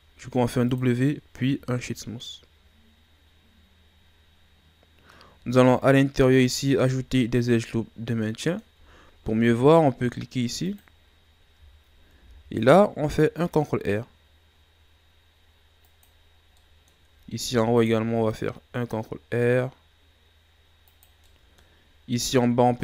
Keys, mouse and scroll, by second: 1.8-2.2 scroll down 1, 2.2-5.2 middle drag, 5.4-6.3 ctrl+scroll up 6, 6.4 Tab, 7.7-8.1 scroll down 1, 8.1-9.0 middle drag, 9.0 ctrl+scroll up 1, 10.6 click, 12.1 ctrl+r, 16.3 scroll down 1, 16.6 middle click, 17.4 ctrl+r, 21.2-22.8 middle drag.